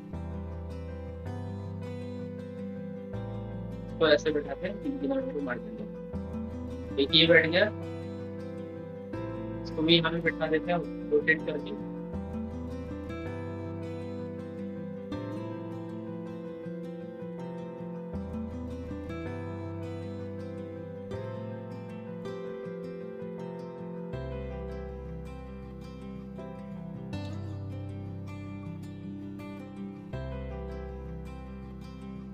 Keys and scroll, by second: 11.7 ctrl+z.